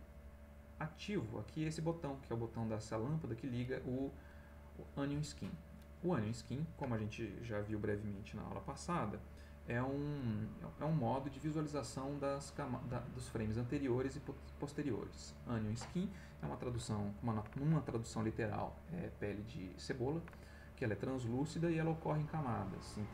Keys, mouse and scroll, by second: 0.1 click, 0.8 click, 2.6 click, 3.1 click.